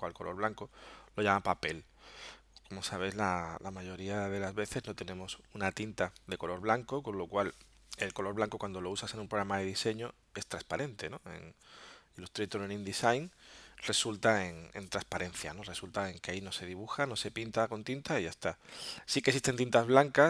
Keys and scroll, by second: 6.3 alt+super+-.